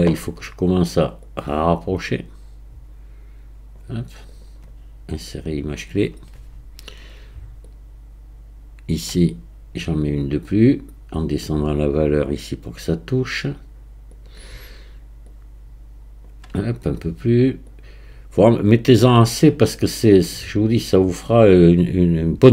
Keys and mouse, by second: 1.3-3.9 drag, 4.4-5.5 drag, 7.6-8.9 drag, 11.2-12.8 drag, 13.2-14.3 middle drag, 15.2 click, 17.8-19.1 drag, 20.0-21.1 drag.